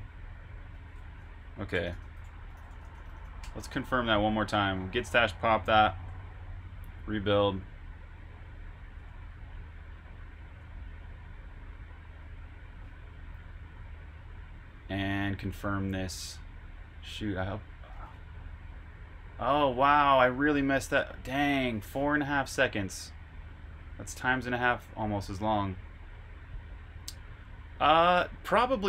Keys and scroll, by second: 1.4-3.6 typing, 5.6 super+b, 5.9-6.8 typing, 9.3 super+Tab, 17.9 super+q.